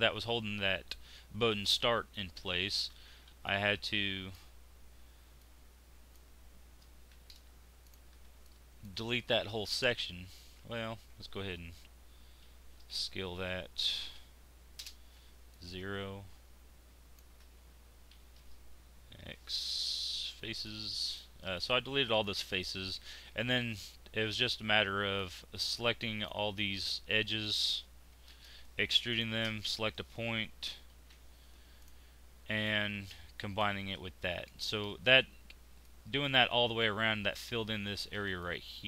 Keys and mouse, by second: 2.1 middle click, 2.9 z, 7.1 x, 8.1 z, 10.6 ctrl+z, 12.5 shift+s, 15.0 z, 18.1 x, 20.4 z, 25.1-28.1 middle drag, 28.1 ctrl+e, 30.9 alt+m, 32.7 middle click, 36.0 middle click, 38.2 middle click.